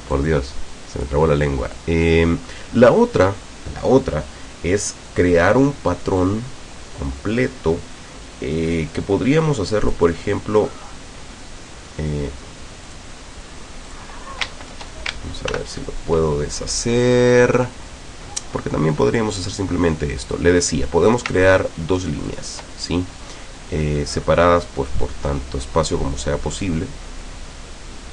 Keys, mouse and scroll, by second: 0.2-1.2 drag, 1.8-3.4 drag, 5.1 click, 9.4 click, 9.8 click, 12.9 click, 14.0 click, 15.6 ctrl+shift+k, 19.5 click, 20.2 click, 21.2 ctrl+click, 22.0 ctrl+click, 23.8-24.8 middle drag, 25.2 middle click.